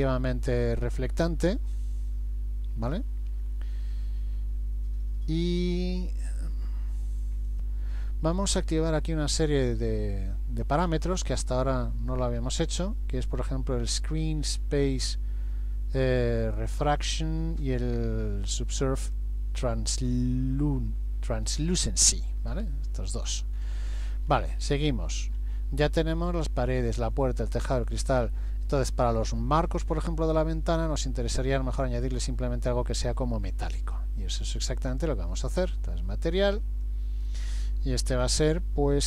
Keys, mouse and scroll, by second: 0.6-1.0 scroll down 2, 1.1-1.7 scroll down 3, 1.7-2.3 scroll down 5, 2.8-3.7 scroll down 7, 16.4 click, 19.0 click, 23.6-26.3 scroll up 22, 33.8 click, 34.9 click, 36.5 click.